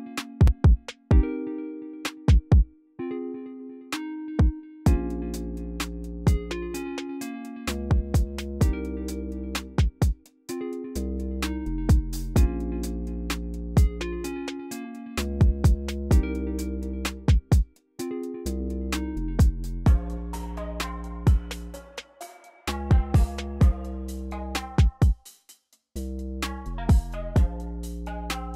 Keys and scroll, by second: 15.2 v, 17.6 x, 20.8 c, 21.9-22.8 typing, 25.2 typing.